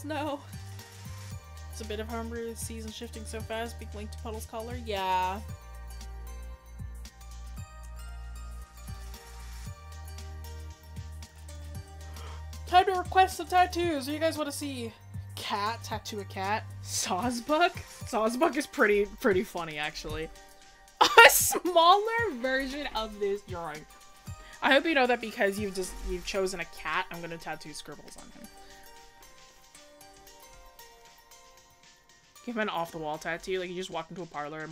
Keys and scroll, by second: 19.2 scroll up 1.